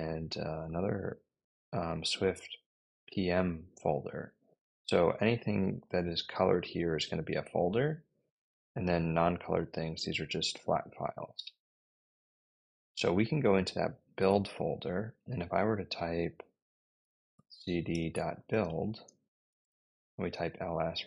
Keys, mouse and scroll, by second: 4.8 click, 5.0 click, 6.4 click, 6.6 click, 13.4 click, 17.0-20.4 typing.